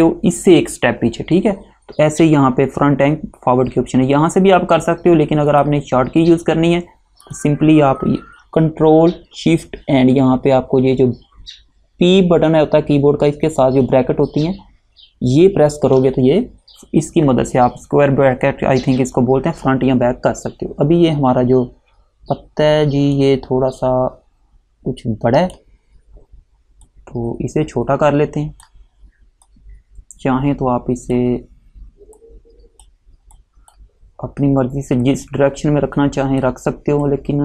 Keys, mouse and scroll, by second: 5.6 click, 23.3 click.